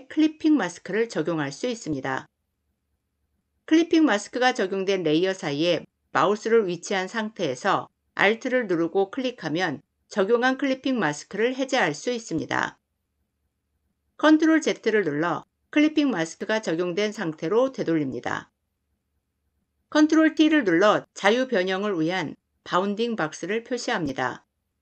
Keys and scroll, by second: 14.1 ctrl+z, 20.0 ctrl+t.